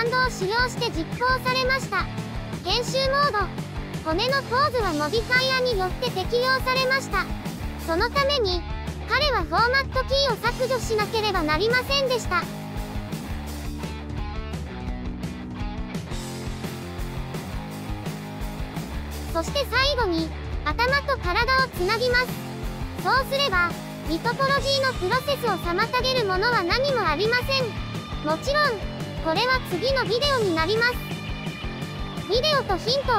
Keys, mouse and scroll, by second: 0.0 click, 0.3-1.3 right drag, 1.7 ctrl+j, 2.0 scroll down 12, 2.1 shift+middle click, 2.3 ctrl+z, 2.4-2.8 scroll up 10, 3.1 click, 4.5 Tab, 4.7 scroll down 2, 4.8 shift+middle click, 5.6 ctrl+z, 6.2 ctrl+z, 6.4 shift+middle click, 6.5-6.9 scroll up 2, 6.6 shift+middle click, 6.9 right click, 7.5 click, 8.5 click, 9.4 scroll down 4, 9.4 shift+middle click, 9.9 shift+right click, 10.6 ctrl+j, 10.8 scroll down 2, 10.9 shift+middle click, 11.3 ctrl+z, 11.4 shift+middle click, 11.5 scroll up 3, 11.6 right click, 11.9 n, 12.4 click, 12.7 click, 13.4 shift+c, 13.5 scroll up 5, 13.6 shift+middle click, 13.8 shift+middle click, 14.1 right click, 14.8 ctrl+j, 14.9-15.3 scroll down 11, 15.4 ctrl+z, 15.5 scroll up 5, 16.2 click, 16.4 scroll down 4, 16.5 shift+middle click, 16.7 ctrl+z, 16.8 scroll up 5, 17.0-17.6 drag, 17.9 right click, 18.7 click, 19.7-20.8 drag, 21.3-24.7 drag, 24.8 Tab, 24.9 Tab, 25.4-26.6 drag, 26.6 shift+right click, 27.0 ctrl+j, 27.3 shift+middle click, 27.5 scroll up 5, 27.6 shift+middle click, 28.5 scroll up 1, 28.6 shift+middle click, 29.2 Tab, 29.4 shift+middle click, 29.6 scroll up 4, 29.7 shift+middle click, 30.7 a, 30.9 scroll down 1, 31.0 middle click, 31.6 q.